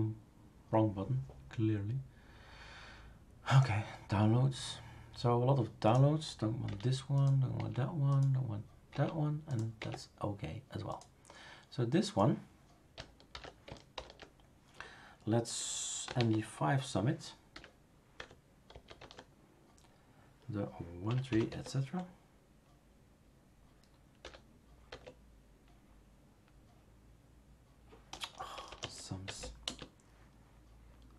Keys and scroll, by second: 6.7 Delete, 7.5 Delete, 8.9 Delete, 9.8 Delete, 13.3 super+v, 13.9 super+Return, 16.0-19.2 typing, 18.2 Tab, 21.0-21.8 typing, 24.2 typing, 24.9 Tab, 28.2-29.6 typing, 29.2 Tab.